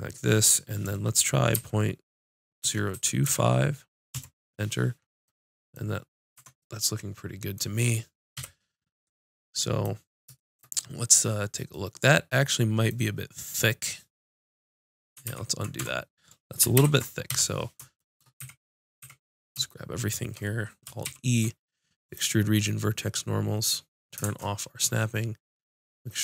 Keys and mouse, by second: 6.4 Tab, 8.4 KP_5, 15.3 ctrl+z, 15.8 Tab, 16.8 ctrl+KP_7, 17.3 KP_5, 18.4 a, 19.0 a, 21.1 alt+e.